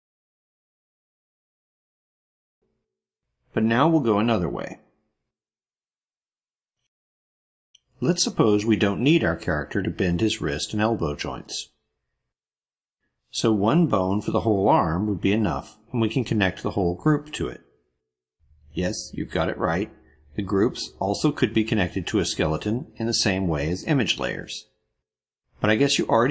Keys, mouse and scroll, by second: 0.6 click, 0.9 click, 1.2 click, 1.7 click, 2.1 click, 2.4 click, 2.6 click, 2.8 click, 5.8-7.6 drag, 16.8 click.